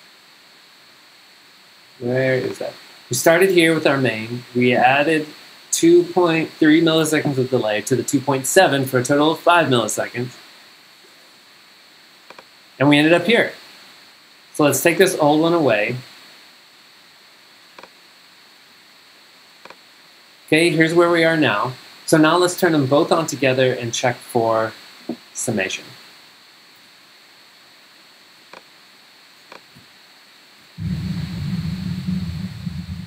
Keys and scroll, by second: 26.9 super+Tab, 29.8 super+Tab, 30.6 super+g, 32.6 v.